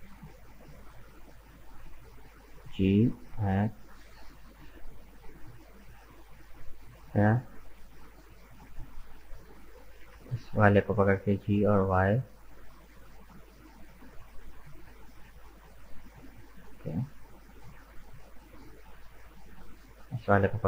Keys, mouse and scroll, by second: 0.2 shift+right click, 1.0 shift+right click, 1.5-2.6 middle drag, 2.6 g, 6.4-9.5 middle drag, 9.7 right click, 10.5 shift+right click, 11.2 g, 13.7-16.7 middle drag, 18.2-19.6 middle drag, 19.6 right click, 19.8 middle click.